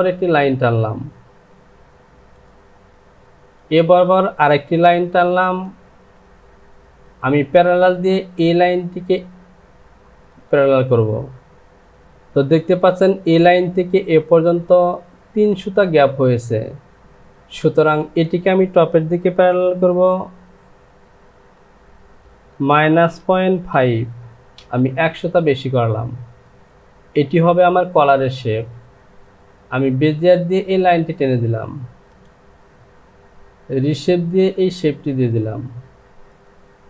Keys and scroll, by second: 22.5 KP_Subtract, 23.7 KP_Decimal, 24.6 Return.